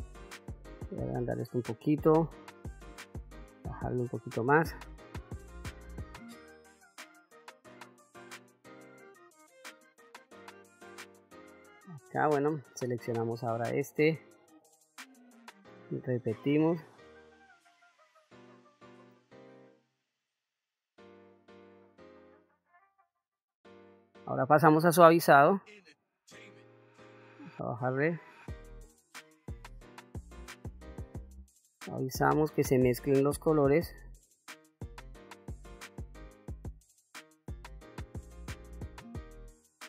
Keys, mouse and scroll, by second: 0.6 f, 2.1 shift+f, 3.5 click, 4.1 click, 4.8-6.4 drag, 7.0 click, 7.8 click, 8.4-10.3 drag, 11.4 middle click, 13.2 click, 14.4-17.0 drag, 17.5 click, 18.1 click, 18.9 click, 19.8 middle click, 21.2-23.5 drag, 24.6 click, 25.8 click, 26.9 f, 28.5-30.5 drag, 31.0-36.0 drag, 36.1 middle click, 36.3-37.3 drag, 37.4 middle click, 37.6 click, 38.1 middle click, 38.3 shift+middle click, 38.7 f, 39.2-39.8 drag.